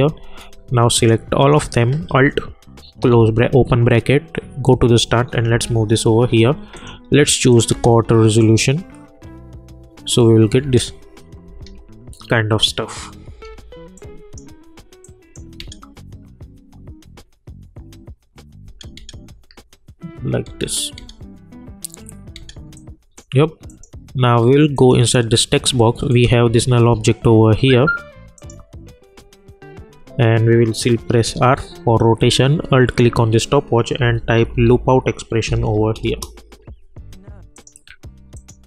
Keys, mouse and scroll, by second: 1.0 shift+click, 3.0 alt+[, 4.6 click, 5.5 [, 6.7 click, 7.7 space, 10.6 space, 13.9 click, 15.6 space, 18.6 space, 22.7 click, 28.3 click, 31.2 r, 32.9 alt+click, 33.8-34.9 typing, 35.4 Down, 36.0 Return, 37.5 click.